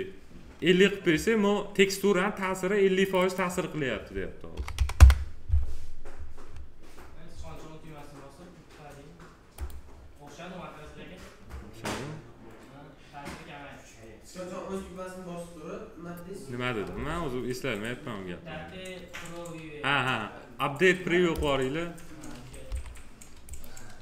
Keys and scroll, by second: 4.5 5, 4.9 Return, 16.9 space, 22.6 m.